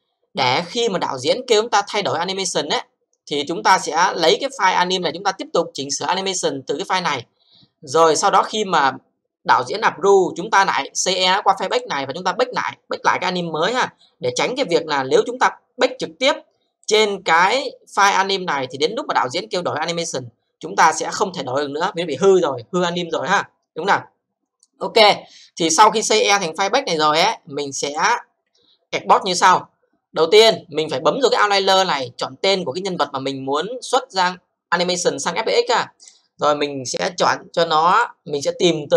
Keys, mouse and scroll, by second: 4.4 click, 16.8 click, 25.6 click, 27.9 click, 30.4 click, 31.3 click, 36.0 click, 37.9 click.